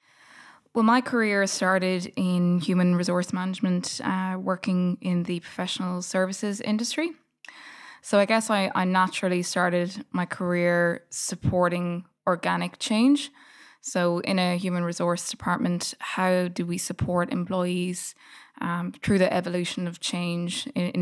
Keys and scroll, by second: 0.0 s.